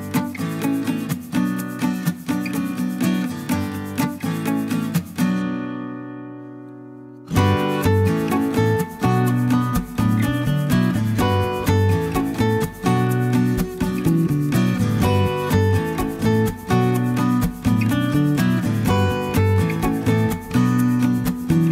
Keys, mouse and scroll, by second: 0.6 0, 1.6-1.9 scroll down 1, 2.1-2.5 scroll up 1, 2.6-9.3 middle drag, 9.3 click, 11.0 click, 13.5 click, 15.0 click, 17.5 click, 18.6 1, 19.0 5, 20.5 0, 21.6 click.